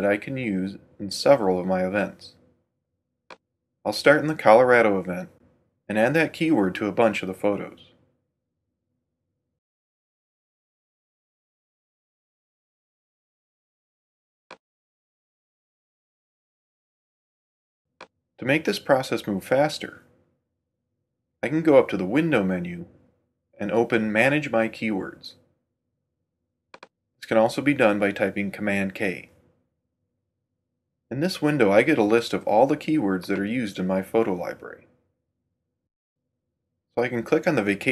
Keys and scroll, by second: 9.1-10.4 typing, 10.9 Return.